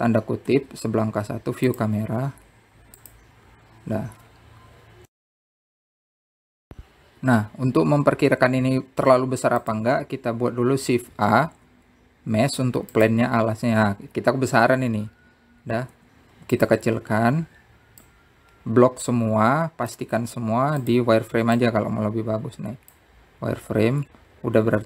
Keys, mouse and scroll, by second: 4.8 click, 8.9 click, 10.7 shift+a, 16.6-17.3 scroll down 2, 17.3-19.2 drag, 19.5 z, 20.9 click, 23.0-23.8 scroll up 1, 23.8 s.